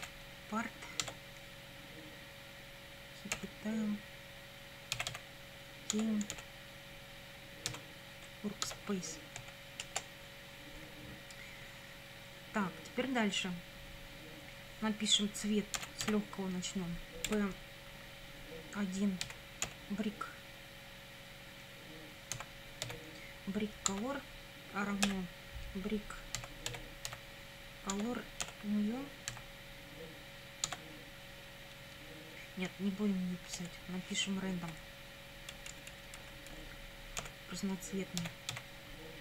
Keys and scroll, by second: 0.0 p, 1.1 Tab, 3.4 ,, 4.7-6.3 typing, 5.9 Tab, 7.7 w, 8.7 Tab, 9.4 Right, 9.8 Return, 15.6-17.3 typing, 19.2 1, 19.7 ., 22.3 b, 22.9 r, 23.9 Tab, 25.1 =, 26.1-29.3 typing, 27.9 Tab, 30.7 Tab, 33.6 BackSpace, 34.8 \, 35.5 BackSpace, 37.2 ., 38.2 r, 38.5 a.